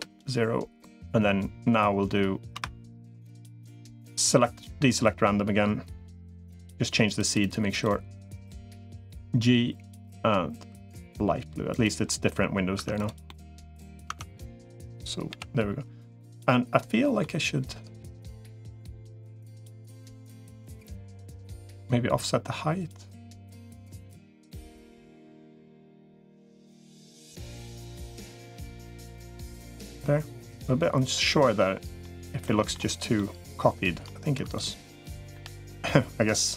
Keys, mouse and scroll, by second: 2.3 F3, 6.9 click, 7.5 click, 8.9 g, 11.9 middle click, 12.7 Tab, 13.0 middle click, 13.9 Tab, 15.1 l, 16.3 middle click, 17.9-21.1 drag, 21.7-23.9 drag, 24.7-27.1 drag, 27.7 click, 29.1 click, 29.8-31.2 middle drag, 31.4 middle click, 32.2 middle click, 32.7 click, 33.0 middle click, 34.3 click, 35.1 l, 35.9-36.5 drag.